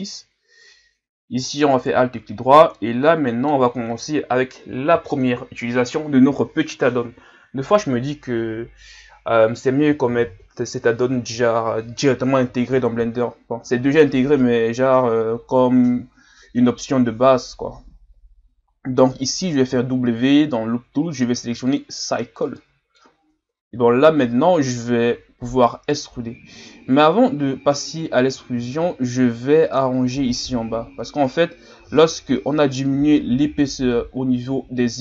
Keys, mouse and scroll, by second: 1.8 alt+right click, 2.3 scroll down 3, 2.7-18.4 middle drag, 18.4 w, 19.7 w, 22.5-23.7 middle drag, 23.7 KP_1, 24.6 scroll down 4, 26.6 Tab, 28.3 middle click, 28.8 Tab, 29.4 shift+scroll down 2, 29.8-30.8 middle drag, 30.8 scroll down 2, 31.1 middle click, 32.0 scroll down 4, 32.3-32.7 scroll up 3, 32.7-34.6 middle drag, 34.6-34.9 scroll down 3, 34.9-35.0 middle drag.